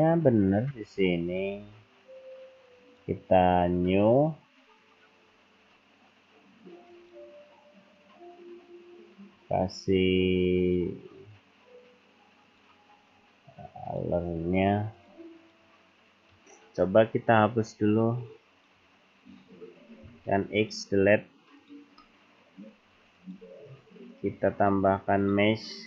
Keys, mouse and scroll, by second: 2.7 click, 4.0-4.3 scroll down 3, 4.7-5.3 scroll down 2, 5.3-6.1 scroll down 3, 6.9 click, 12.5 click, 15.2 click, 15.5 click, 17.3 Escape, 18.6 click, 18.8 Escape, 20.1 x, 22.1 click, 22.1 middle click, 23.2 click.